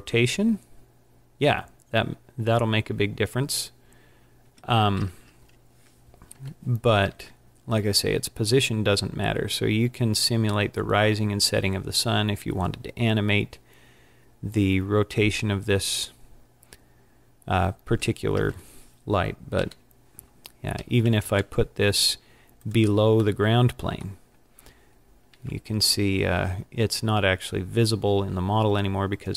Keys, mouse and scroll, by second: 6.5 KP_7, 7.1 r, 19.7 KP_1, 20.8 g, 22.8 click, 23.4 middle click, 25.0 scroll down 2, 25.3 z, 26.6 scroll down 2, 27.3 scroll down 3, 29.1 scroll up 4.